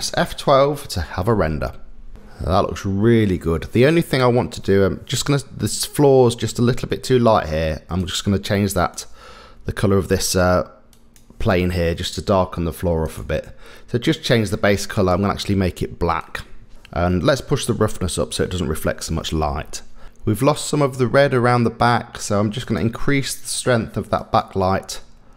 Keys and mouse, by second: 1.5 F12, 8.8 click, 9.9 middle click, 10.9 click, 13.0 click, 16.2 click, 16.7 KP_0, 17.6-19.0 drag, 24.3 click.